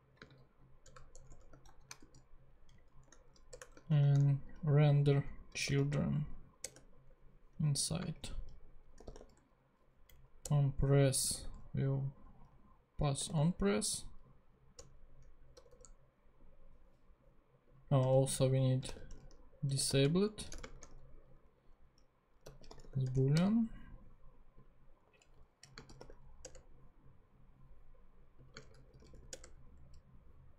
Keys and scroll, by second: 0.2 space, 0.8 BackSpace, 1.1 Return, 1.7 shift+,, 2.0 shift+/, 2.7 Up, 3.0 Tab, 3.5 BackSpace, 3.9 shift+[, 5.4-6.3 typing, 6.7 Return, 8.1-9.5 typing, 10.3 Down, 10.5 Return, 11.3 =, 13.3 n, 14.9 Return, 15.5 BackSpace, 18.1 Return, 18.2-21.0 typing, 22.2-23.5 typing, 25.0 Right, 25.4-26.5 typing, 26.5 Return, 28.5-29.5 typing.